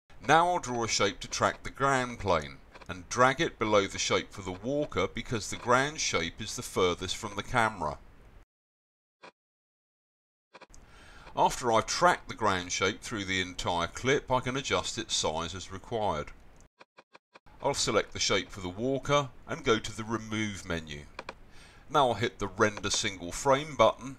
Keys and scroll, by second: 1.0 x, 2.8 c, 5.7-7.0 typing, 9.3-10.2 typing.